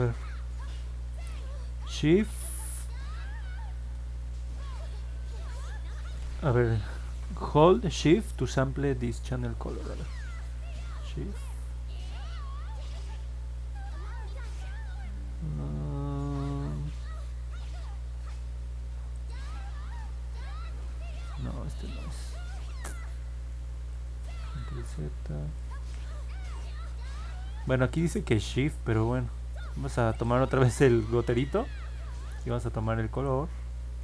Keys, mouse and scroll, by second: 19.1 shift+click, 24.4 ctrl+z, 30.1 click, 33.1 click.